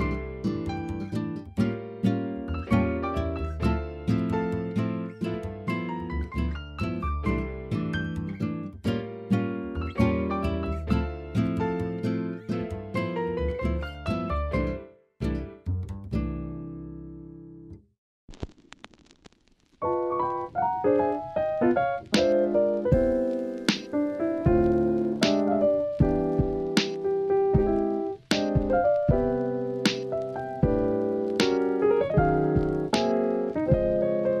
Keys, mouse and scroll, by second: 0.4 scroll up 1, 0.4-0.8 middle drag, 0.8-1.5 scroll down 1, 1.5-1.9 drag, 1.9 middle drag, 2.5 KP_1, 4.8 click, 5.0 click, 5.7 ctrl+s, 6.3-7.8 drag, 8.3-8.9 drag, 9.2 click, 12.3 ctrl+s, 12.7 alt+z, 13.3 shift+middle click, 13.6-14.4 drag, 15.6-20.0 middle drag, 20.4 middle click, 22.4 click, 23.0 KP_1, 24.3 alt+z, 28.6 shift+a, 32.2 s.